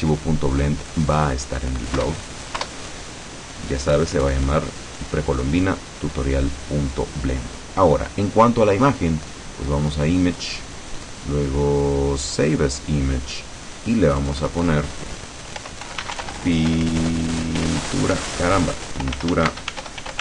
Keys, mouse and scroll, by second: 2.1 Return, 3.0 Return, 10.2 click, 12.6 click, 14.3 click, 15.4-20.2 typing.